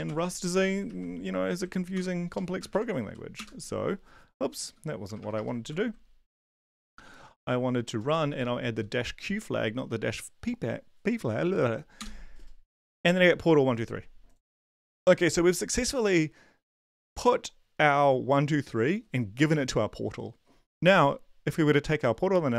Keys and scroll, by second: 0.9 ctrl+`, 1.9 ctrl+l, 2.3 Up, 2.6 space, 2.7 -, 3.0 p, 3.3 Return, 4.7 Up, 5.0 BackSpace, 5.2 BackSpace, 5.3 BackSpace, 5.7 ctrl+l, 6.8 Up, 7.3 Up, 8.0-8.8 typing, 12.0 Return.